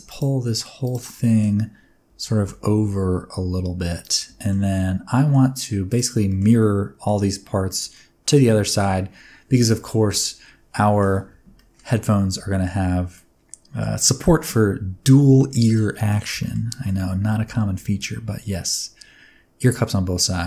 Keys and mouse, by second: 0.1 shift+click, 1.2 middle click, 2.0 g, 2.4 x, 4.0 ctrl+click, 4.5 middle click, 6.2 shift+middle click, 6.5-7.0 middle drag, 7.6 shift+middle drag, 7.9 middle click, 8.6 shift+middle drag, 10.1-10.9 middle drag, 11.5 shift+middle click, 12.5 shift+middle click, 13.1-13.7 middle drag, 15.3 shift+middle click, 15.7-16.0 middle drag, 16.3 shift+middle click, 16.6 middle drag, 17.3 shift+a.